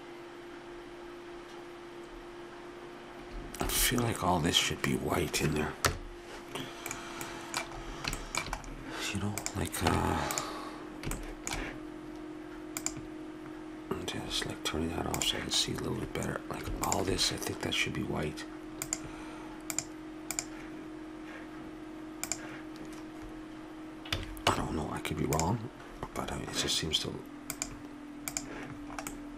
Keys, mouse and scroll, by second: 3.7 shift+z, 5.9 KP_0, 6.9 middle click, 9.4-10.4 drag, 9.9 Tab, 11.2-12.8 middle drag, 12.8-14.5 drag, 14.5 middle click, 15.2-18.6 drag, 18.9-22.0 drag, 22.1 click, 22.3-24.1 drag, 24.2 a, 24.5 Tab, 25.4 Tab, 27.6-29.1 drag, 29.1-29.3 middle drag.